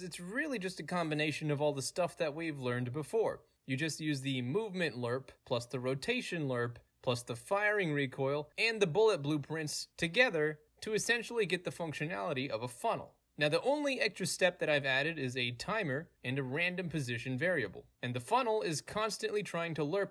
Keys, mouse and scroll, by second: 3.4-5.4 scroll down 2, 5.8-6.8 scroll down 1, 6.8-8.6 scroll up 2, 8.6-10.6 scroll down 2, 10.6 alt+p, 11.2-14.5 alt+right drag, 15.3 click, 17.1 click, 18.6 right click, 18.9 middle click, 18.9 scroll up 2, 19.3 right click.